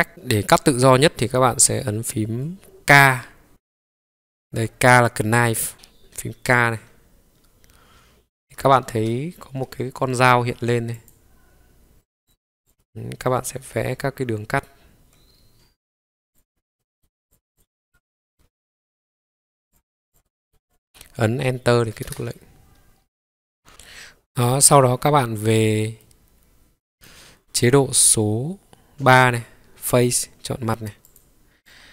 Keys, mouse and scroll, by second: 1.3 middle click, 6.3 k, 8.7 ctrl+k, 12.7-22.5 middle drag, 16.4-17.2 scroll down 3, 16.7-17.2 scroll up 1, 17.2 scroll up 1, 18.3-18.6 scroll up 1, 18.8 scroll up 2, 22.9-23.7 scroll down 3, 23.7-24.7 middle drag, 25.5-26.0 scroll down 2, 26.0-27.1 middle drag, 29.9 click, 31.1 click, 31.6 click.